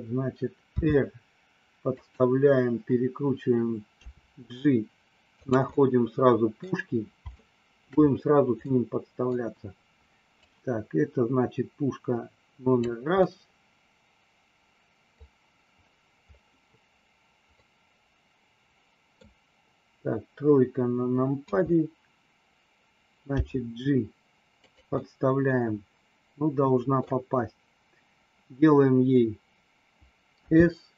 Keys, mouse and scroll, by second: 0.8 r, 2.0 click, 3.9 g, 5.4 click, 5.6-6.6 middle drag, 7.3 shift+middle click, 8.5 scroll up 1, 8.8 middle click, 10.4-12.8 drag, 13.3 scroll up 1, 13.4-15.2 middle drag, 17.5-19.3 middle drag, 21.4 KP_3, 23.3 g, 24.5 click, 25.0-27.0 middle drag, 30.3 s.